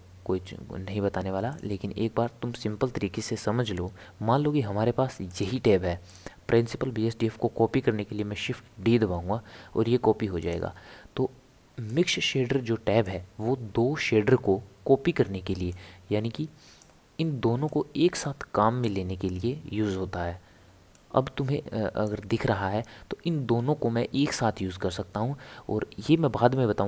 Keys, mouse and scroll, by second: 6.1 click, 8.5 shift+d, 11.9 click, 15.7 click, 17.7 click, 20.9 click.